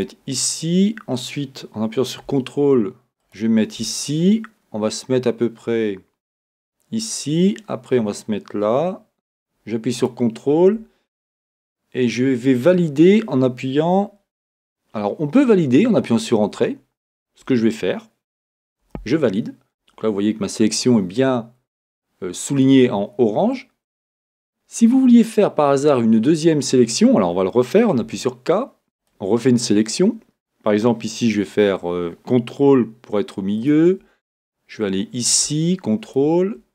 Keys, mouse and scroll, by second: 18.9 Return, 18.9-28.0 middle drag, 28.0 k.